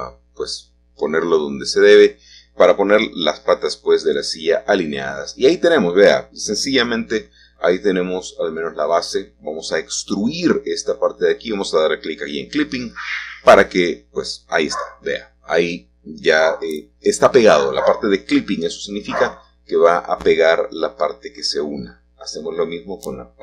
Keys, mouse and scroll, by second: 0.0-1.1 drag, 6.1-7.8 middle drag, 8.2-9.3 drag, 12.2-13.3 drag, 13.5 e, 14.4 click, 17.2 click, 17.9 click, 19.6 e, 20.7-22.5 drag, 22.5 middle click.